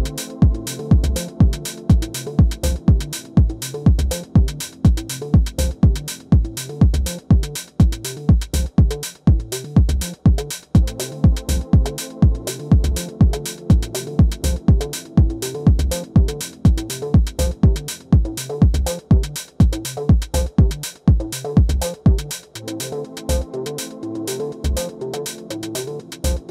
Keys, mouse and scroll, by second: 0.3-2.2 middle drag, 2.9 s, 6.1-7.8 middle drag, 7.8 KP_3, 9.3-11.3 drag, 10.5 Tab, 11.3 middle click, 12.5 shift+a, 15.6 Tab, 16.8-20.0 drag, 20.0 g, 21.9-23.5 middle drag, 23.5-26.1 right drag, 24.7 a, 25.1 a, 26.1 r.